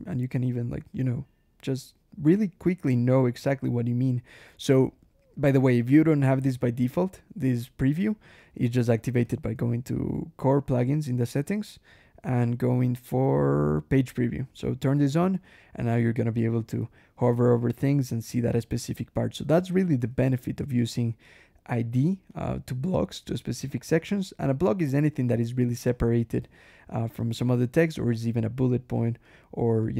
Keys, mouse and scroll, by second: 2.1 click, 8.2 click, 9.1 ctrl+,, 12.7-13.2 scroll down 1, 16.4 click, 19.6 click, 20.0 ctrl+e, 21.1 click, 22.2 click, 26.3 ctrl+e, 27.0 ctrl+click, 28.1 click, 29.1 click, 29.7 click.